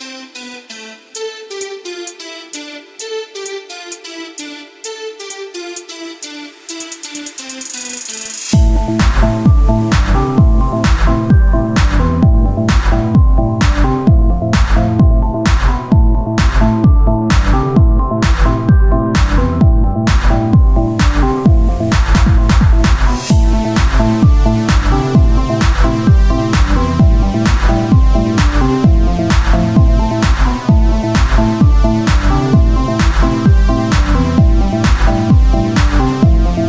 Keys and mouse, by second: 3.4 Tab, 5.2 click, 5.6-10.6 right drag, 7.6 click, 10.6 ctrl+r, 11.8-14.2 right drag, 12.6-14.2 drag, 16.1 click, 17.6 Tab, 21.5 Tab, 22.0-23.7 drag, 23.9 s, 26.2-27.3 drag, 28.6 Tab, 29.2 KP_1, 32.5 z.